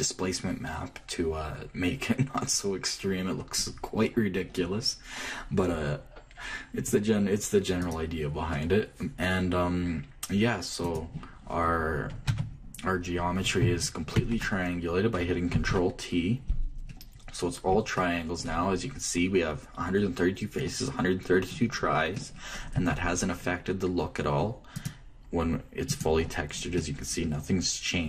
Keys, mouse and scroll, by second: 8.5-10.5 drag, 13.0 Tab, 14.3 click, 15.8 click, 18.4 click, 19.4-21.6 middle drag, 22.8-25.5 middle drag, 23.4 Tab, 25.5-27.2 drag, 27.5-28.0 middle drag.